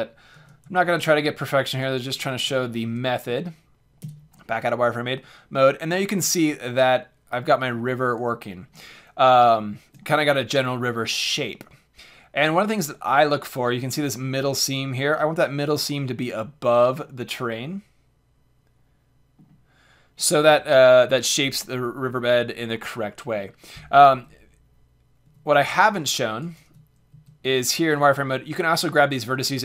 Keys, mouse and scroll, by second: 0.3 ctrl+a, 2.1 a, 2.5 Tab, 4.0 z, 8.2 middle click, 8.5-11.6 middle drag, 11.6 click, 11.7 middle click, 11.8 click, 12.9-17.0 middle drag, 18.8 middle click, 19.0-21.4 scroll down 1, 24.1 Tab, 25.2 Tab, 26.6 Tab, 27.1 z, 27.4 click, 29.2 click, 29.3 g.